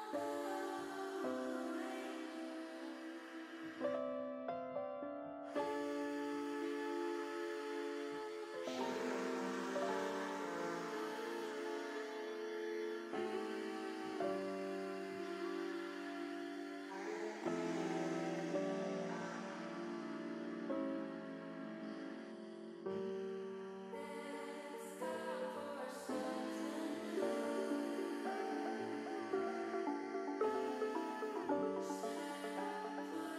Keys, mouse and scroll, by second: 2.3 click, 4.7 ctrl+z, 5.6-6.7 drag, 11.0 shift+middle click, 12.0 click, 13.6 alt+shift+click, 14.6 alt+shift+click, 15.7 ctrl+KP_Add, 15.8 ctrl+KP_Add, 16.0 ctrl+KP_Add, 16.1 ctrl+KP_Add, 16.6 ctrl+KP_Add, 17.1 ctrl+KP_Add, 17.4 ctrl+KP_Add, 17.7 ctrl+KP_Add, 18.1 ctrl+KP_Add, 18.4 ctrl+KP_Add, 19.3 ctrl+KP_Subtract, 21.8 click, 22.9 click, 24.9 click, 25.6 click, 26.1 middle click, 27.2 middle click, 29.1 click, 30.6 middle click, 31.8 KP_1.